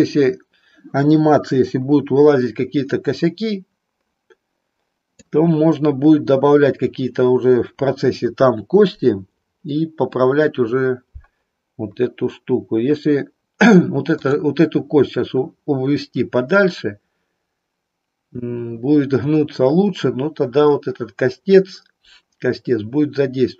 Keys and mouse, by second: 2.9-5.3 middle drag, 14.1 click.